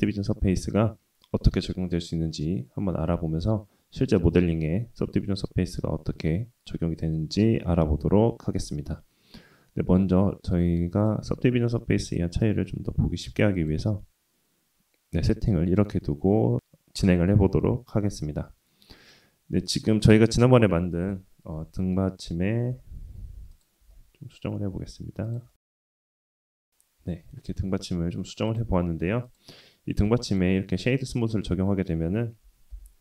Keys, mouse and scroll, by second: 10.9-15.3 drag, 17.5 click, 18.3 KP_1, 19.0 s, 19.4 g, 20.1 middle click, 20.7 r, 21.6 g, 22.0 middle drag, 22.4 KP_1, 23.1 r, 24.2 right click, 24.5-25.0 middle drag, 25.3 s, 26.2 middle drag, 26.9 scroll up 2, 27.1 click, 27.7 click, 28.6-29.2 right drag, 29.6-30.0 middle drag, 30.6 /, 31.8-33.0 middle drag.